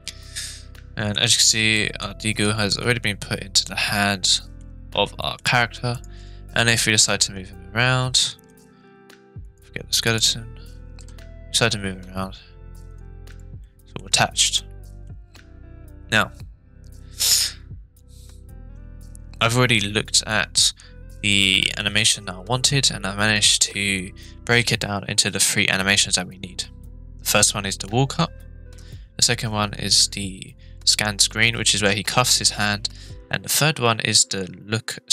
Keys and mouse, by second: 1.3 click, 1.8 middle click, 2.7-4.6 middle drag, 5.2 middle drag, 5.9 click, 7.0 g, 8.5 right click, 9.4 click, 10.1 click, 10.9 g, 12.9 right click, 13.6-13.9 middle drag, 14.7 middle click.